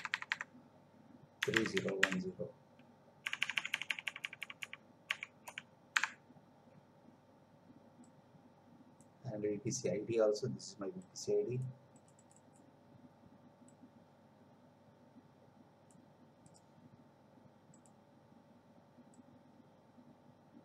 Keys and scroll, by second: 1.4 3, 3.2 Left, 5.9 BackSpace.